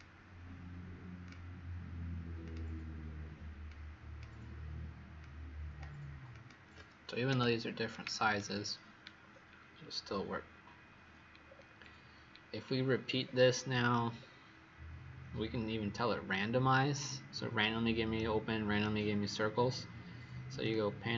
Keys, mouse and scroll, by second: 7.2 Delete, 7.8 right click, 9.1-9.9 scroll down 2, 9.9-11.4 scroll up 3, 11.4-12.4 scroll down 4, 12.4-13.2 scroll down 1, 13.2-14.1 scroll up 2, 14.1-16.9 scroll down 2, 16.9-18.1 scroll up 1, 18.1 right click, 20.5 click.